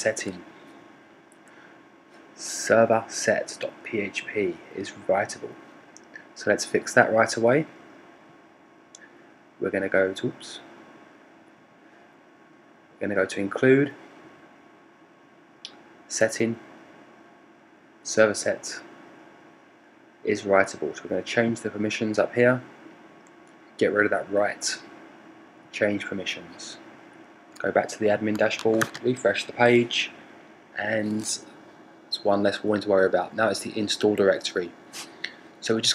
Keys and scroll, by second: 28.2 super+r.